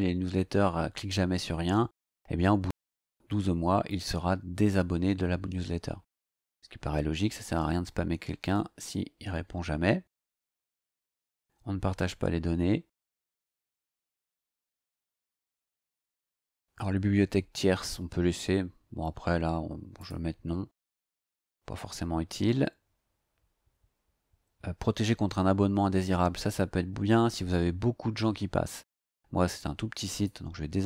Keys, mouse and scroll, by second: 10.5-20.0 scroll down 2, 20.0 click, 21.5-21.9 scroll down 2, 30.1 click.